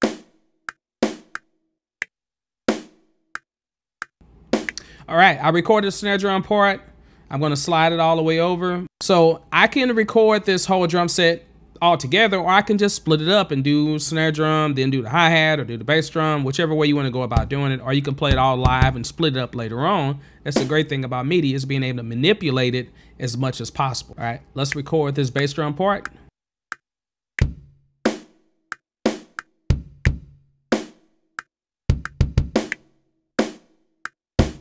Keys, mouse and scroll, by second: 0.0 click, 1.0 click, 2.7 click, 4.5 click, 5.2 space, 7.4 click, 9.3 click, 13.6 click, 14.8 click, 16.0 click, 16.7 click, 17.3 click, 18.3 click, 18.6 click, 18.8 click, 19.9 space, 21.2 space, 22.4 click, 24.4 ctrl+z, 24.7 r, 27.4 click, 29.7 click, 30.1 click, 31.9 click, 32.2 click, 32.4 click, 34.4 click.